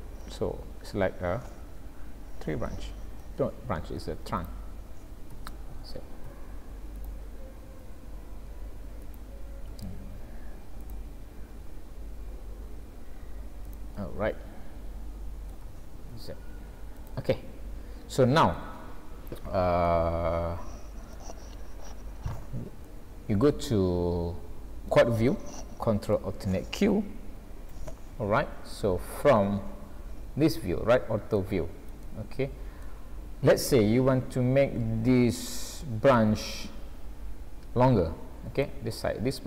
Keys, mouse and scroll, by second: 2.8 scroll up 2, 3.2 middle click, 4.4 click, 5.3 g, 7.7 s, 9.7 e, 11.5 scroll down 3, 12.0 s, 14.0 middle click, 15.6 g, 17.3 middle click, 19.2-19.8 scroll up 4, 19.9 middle click, 22.8 middle click, 27.3 ctrl+alt+q, 30.6 shift+middle click, 31.6 scroll up 2, 32.1 shift+middle click, 33.2 scroll down 1, 33.9 scroll down 2, 34.2-34.6 scroll up 4, 35.4-35.8 scroll up 2, 35.8 shift+middle click, 38.8 shift+middle click.